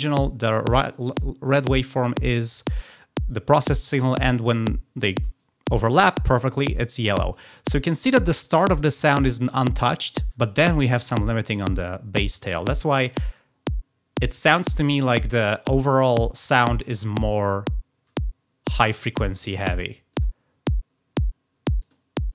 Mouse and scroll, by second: 20.0 click, 21.7 click.